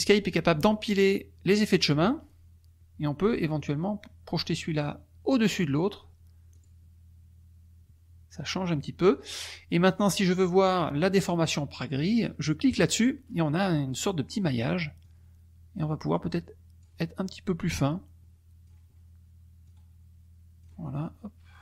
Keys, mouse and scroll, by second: 6.5 click, 12.7 click, 15.0-17.0 drag, 17.5-19.0 drag, 19.6 click, 19.7-20.8 scroll up 2.